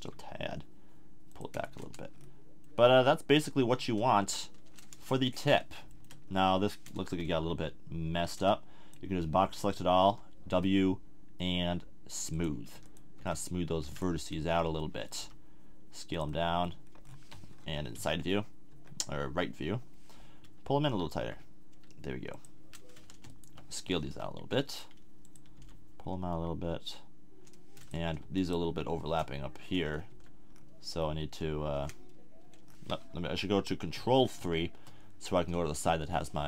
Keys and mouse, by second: 1.6 a, 1.8 Tab, 4.3 Tab, 7.1 z, 8.3 b, 10.0 w, 12.7 w, 13.2 w, 13.8 w, 14.8 click, 15.1 s, 16.2-17.3 middle drag, 17.6 KP_3, 17.9 KP_1, 18.8 KP_3, 19.8 middle click, 21.3 g, 22.4-24.4 drag, 23.3-24.4 right drag, 24.0 s, 25.3 click, 25.5 g, 27.3 middle click, 28.4-29.7 drag, 29.0 right click, 29.7 middle click, 30.1 z, 34.4 ctrl+KP_3.